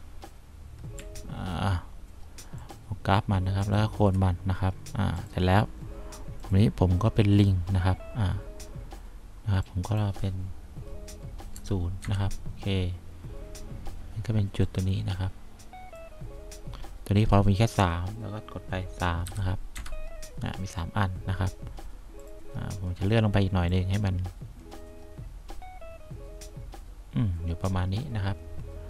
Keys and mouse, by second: 11.9 0, 12.3 Return, 19.6 3, 20.1 Return, 24.0-25.2 drag.